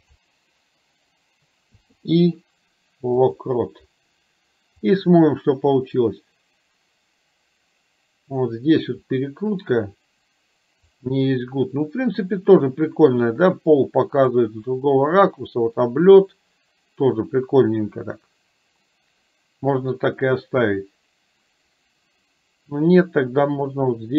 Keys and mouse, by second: 4.9-10.9 drag, 14.4-24.1 drag.